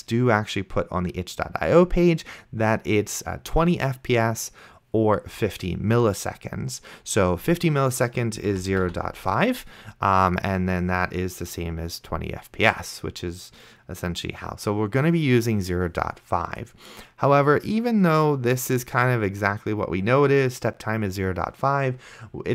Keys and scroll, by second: 8.5-9.4 typing.